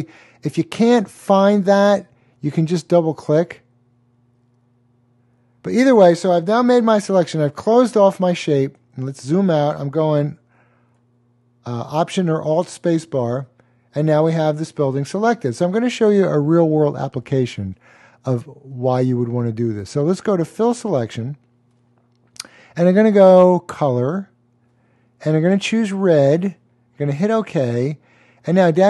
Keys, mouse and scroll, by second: 3.1 click, 7.0 alt+click, 7.7 alt+super+click, 8.0 alt+super+space, 8.1 double click, 10.1 click, 12.4 double click, 18.6 click, 22.5 click, 25.9 click.